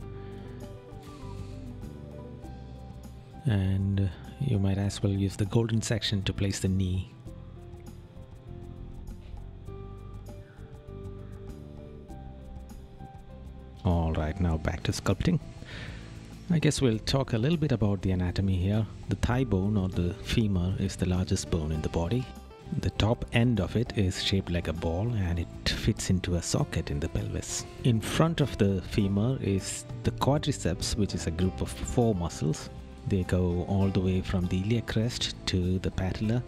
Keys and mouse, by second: 14.8 right click, 16.7 right click, 24.3 right click, 28.7 right click, 33.1 right click, 35.8 right click.